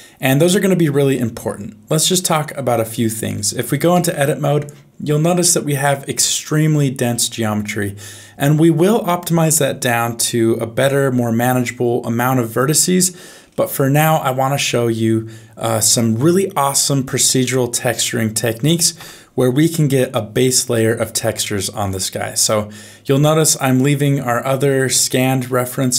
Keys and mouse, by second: 3.3 middle click, 5.5 Tab, 19.2 Tab, 22.4 middle click, 25.1 middle click.